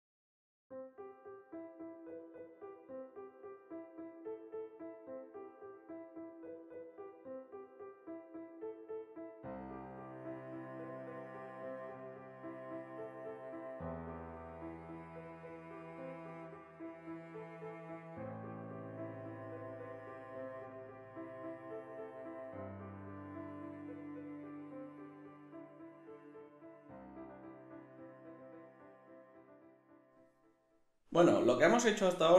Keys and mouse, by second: 0.2 alt+o, 1.9 g, 2.2 click, 2.4 r, 2.7 click, 3.3 g, 3.4 click, 3.9 g, 4.2 click, 4.7 alt+q, 5.9-7.3 shift+middle drag, 7.3 right click, 7.4-9.7 shift+middle drag, 8.8 g, 9.7 click, 9.8-13.5 middle drag, 11.8 Tab, 13.5 right click, 13.7-14.7 ctrl+shift+middle drag, 14.7-17.1 drag, 17.1-18.3 ctrl+shift+middle drag, 18.3 click, 19.0-20.1 middle drag, 20.1 right click, 20.9 click, 21.8-32.3 middle drag, 22.3 a.